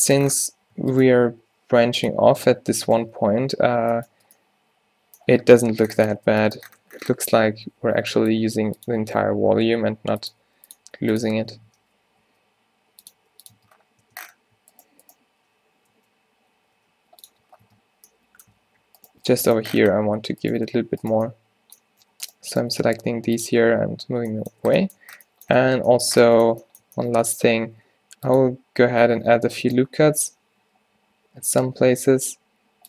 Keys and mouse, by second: 0.5 z, 1.3 e, 2.2 Tab, 2.5 s, 2.9 Tab, 3.2 u, 3.7 z, 4.2 Tab, 6.3 Tab, 6.8 Tab, 7.3 Tab, 7.6 z, 7.9 a, 8.1 b, 8.5 g, 9.7-13.2 typing, 11.4 Tab, 11.8 Tab, 13.6 Tab, 14.1 Tab, 14.8 click, 16.0 d, 16.7 g, 17.4 z, 17.7 Tab, 18.6 Tab, 20.2 g, 20.7 z, 21.1 click, 21.4 click, 22.8 g, 23.6 Tab, 23.8 z, 24.6 middle click, 24.7 Tab, 25.1 Tab, 25.7 Tab, 27.7 ctrl+r, 31.8 g.